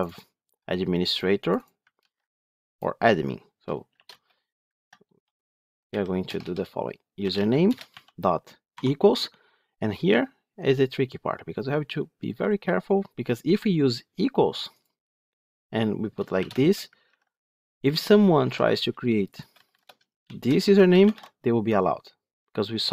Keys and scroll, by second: 1.9 ctrl+c, 7.6 Return, 17.0 ctrl+v.